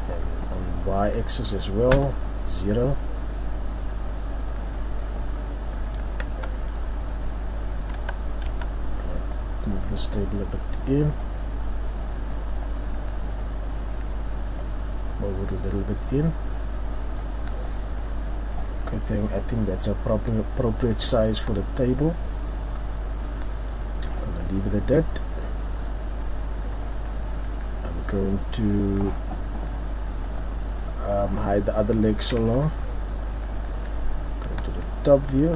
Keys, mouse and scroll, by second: 2.0 KP_0, 3.1 scroll down 1, 4.0 scroll down 1, 6.8 Tab, 8.0 a, 9.8 click, 21.5 Tab, 22.4-23.1 scroll down 2, 22.8-23.5 scroll up 3, 26.4-27.0 scroll down 2, 26.9 middle click, 27.4-28.0 scroll up 1, 28.0-28.5 scroll up 1, 32.5 KP_7, 33.7-34.1 scroll up 1, 34.2 scroll up 1, 34.5-35.4 scroll down 2, 34.6 Tab, 35.4 Tab, 35.4-35.5 scroll up 1.